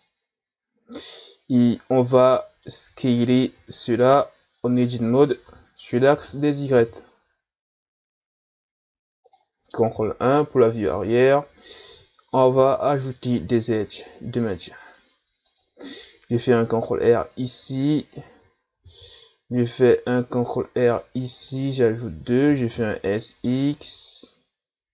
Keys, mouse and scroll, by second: 1.0-3.0 middle drag, 3.0-3.4 ctrl+scroll up 1, 3.4 Tab, 5.2 a, 5.4 a, 6.1 s, 10.0 ctrl+KP_1, 11.2 scroll up 1, 12.6 ctrl+r, 17.3-18.8 drag, 18.8 ctrl+r, 22.5 s.